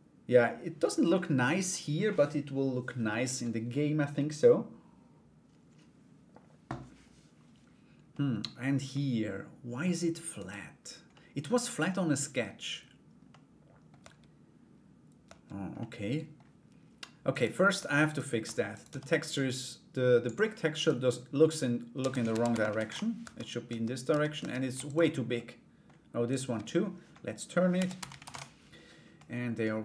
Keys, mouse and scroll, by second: 0.7 middle click, 7.7 middle click, 8.5 middle click, 9.9 right click, 10.7 middle click, 12.8 middle click, 13.6 Tab, 15.4 middle click, 16.9 right click, 17.6 Tab, 17.6 right click, 18.3 right click, 19.8 click, 20.3 right click, 21.9 a, 21.9 r, 22.8 Tab, 24.4 shift+right click, 24.9 middle click, 25.8 right click, 28.7 middle click.